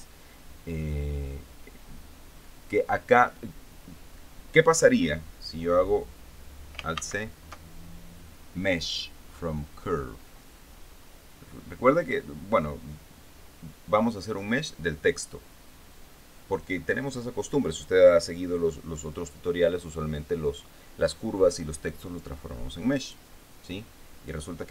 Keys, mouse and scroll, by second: 7.4 alt+c, 23.5 click.